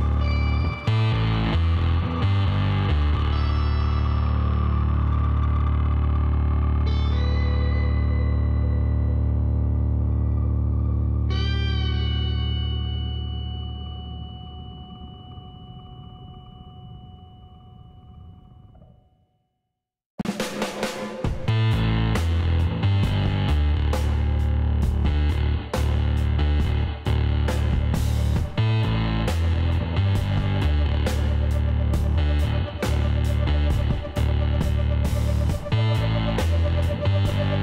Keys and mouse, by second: 2.7 Tab, 3.3 a, 4.9 KP_Divide, 6.0 a, 7.0-8.8 middle drag, 9.9 KP_1, 10.8 z, 14.3 Tab, 17.5 click, 17.9-19.3 middle drag, 19.3-20.9 drag, 20.9-22.3 middle drag, 22.3-24.0 drag, 25.8 z, 29.3 e, 31.4 KP_1, 34.1 z, 35.7 middle click, 35.9 click.